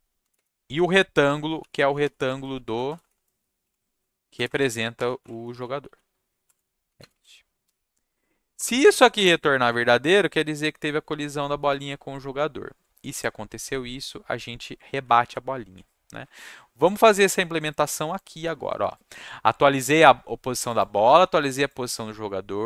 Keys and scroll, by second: 0.2-9.1 typing, 8.0 Down, 8.8 Up, 11.8 =, 15.2 ctrl+shift+s.